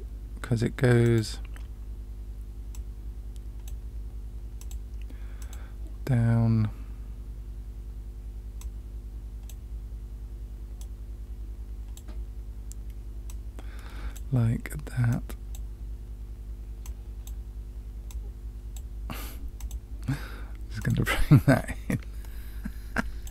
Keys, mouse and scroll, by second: 2.7-3.6 drag, 4.5 click, 5.3 click, 8.5-9.5 drag, 10.7-12.0 drag, 13.2-14.2 drag, 15.1 click, 16.8 click, 18.0-18.8 drag, 19.5 click, 20.7 click, 21.8-23.3 drag.